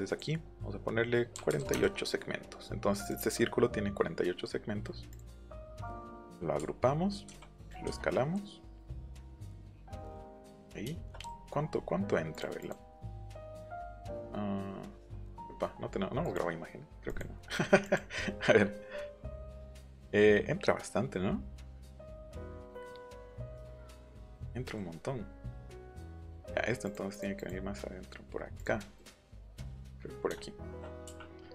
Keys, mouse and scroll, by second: 1.4 KP_4, 1.5 KP_8, 1.7 Return, 3.0 click, 5.1 click, 5.3 click, 5.6 click, 6.6 ctrl+g, 7.6-9.7 drag, 11.7 scroll up 2, 11.8-12.1 scroll down 2, 12.3 click, 12.6 click, 14.1 scroll down 2, 16.3 click, 17.0 click, 17.4 scroll up 1, 17.8 click, 18.6-19.3 scroll down 2, 22.3 scroll down 2, 24.1 click, 24.6 middle click, 25.7 click, 26.0 middle click, 26.9 click, 27.4 click, 28.6 click, 28.8 middle click, 29.3 middle click, 30.4 shift+middle click.